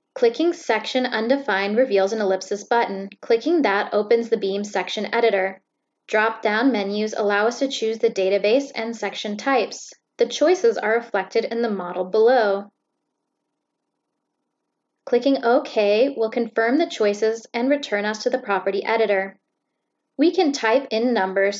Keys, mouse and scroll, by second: 1.3 click, 2.8 click, 5.0 click, 7.1-7.9 drag, 9.3 click, 10.7 click, 12.9-13.6 drag, 13.9 click, 18.2 click, 19.4 click.